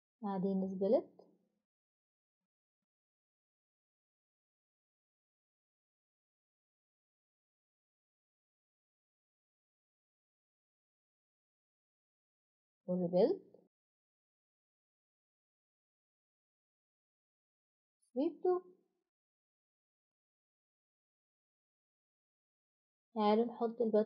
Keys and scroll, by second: 2.5 typing, 9.1 Escape, 15.4 7, 15.7-20.8 Return, 20.8 Escape, 21.1 Escape.